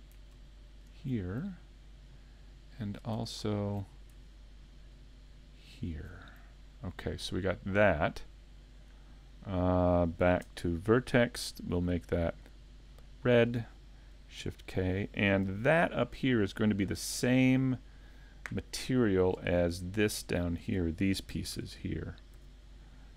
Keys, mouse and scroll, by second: 0.7 alt+shift+right click, 1.4 scroll up 1, 1.8 middle click, 3.9 scroll up 2, 5.7 alt+shift+right click, 6.3 scroll down 4, 6.7 middle click, 12.2 click, 14.4 shift+k, 15.5 a, 16.7 shift+middle click, 19.3-19.8 scroll up 2, 20.1 scroll up 1, 20.6 Tab, 21.5 a, 22.4 a.